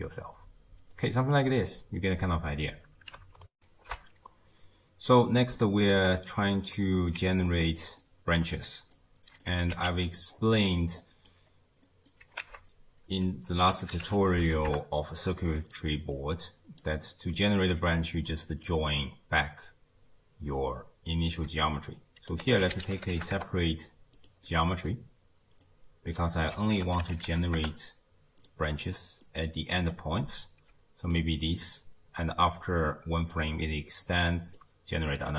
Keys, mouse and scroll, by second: 1.3 space, 3.5 ctrl+alt+shift+w, 6.5-9.0 middle drag, 9.0 click, 9.5 g, 10.3-11.0 scroll up 4, 11.0 middle click, 11.5-11.9 scroll up 1, 11.9-12.4 middle drag, 12.4 ctrl+a, 16.2 click, 17.1 middle click, 17.4-18.3 scroll up 2, 18.7 click, 24.5-25.6 middle drag, 25.6 click, 29.2 click, 29.8-30.7 scroll up 7, 30.7 d, 31.1 click, 31.5-32.6 d, 33.4-34.0 d, 34.1 click, 34.6-35.0 d.